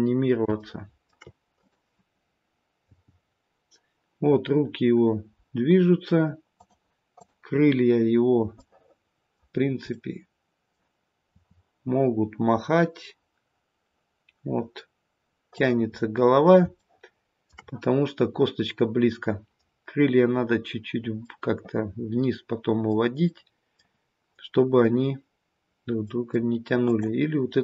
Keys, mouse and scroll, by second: 0.4 scroll up 1, 0.5 shift+middle click, 1.5 click, 3.0 g, 7.1 click, 8.5 middle click, 9.5-11.3 scroll down 2, 9.9 middle click, 11.3 r, 15.8-16.5 scroll up 5, 16.8 shift+middle click, 17.3 shift+middle click, 21.2 middle click, 23.3 middle click, 25.4-26.0 scroll up 1, 26.0 middle click, 26.0 scroll up 1, 26.8 click.